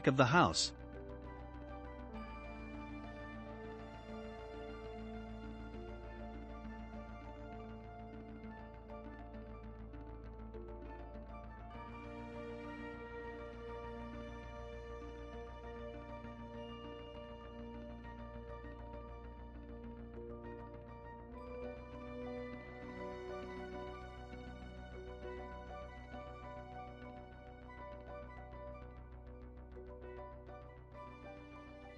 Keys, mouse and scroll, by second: 3.2-4.8 drag, 4.8-7.3 middle drag, 7.3-10.1 drag, 10.1-11.1 middle drag, 11.1 r, 14.2-14.6 scroll down 2, 14.6-16.0 shift+middle drag, 16.0-16.6 scroll up 2, 17.1 scroll up 1, 17.1-20.1 drag, 21.0-22.1 shift+middle drag, 22.1 click, 25.8-26.4 middle drag, 26.4 scroll up 3, 26.9-29.9 shift+middle drag, 29.9-30.3 scroll down 2, 30.3-31.9 middle drag.